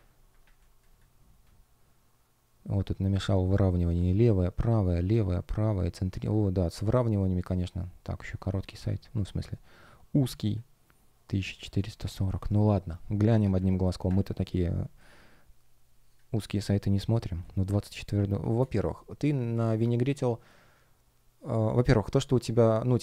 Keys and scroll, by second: 0.4 space, 11.6 space, 12.5 shift+0, 12.5 space, 13.5 super+\, 14.6 space.